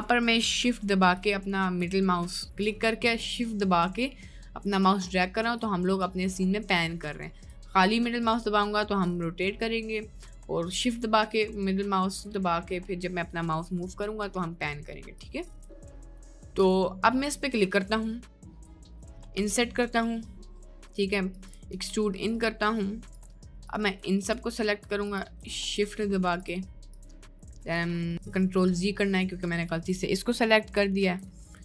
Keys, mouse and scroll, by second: 0.8 shift+middle click, 1.4 middle click, 2.3 shift+middle click, 2.9 middle click, 3.2 middle click, 3.8-5.5 shift+middle drag, 6.4-7.5 shift+middle drag, 7.9-10.2 middle drag, 11.0-15.1 shift+middle drag, 15.7 shift+middle click, 16.0 middle click, 16.3 shift+middle click, 16.4 middle click, 17.2 middle click, 18.6 middle click, 21.5 e, 25.8 shift+click, 28.7 middle click, 31.0 ctrl+z.